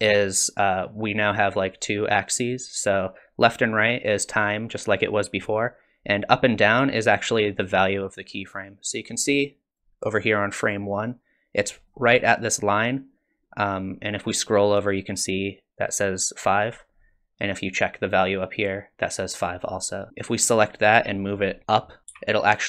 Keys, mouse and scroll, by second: 4.2 click, 8.5 click, 11.8-12.1 scroll up 4, 20.1 click, 22.2 g.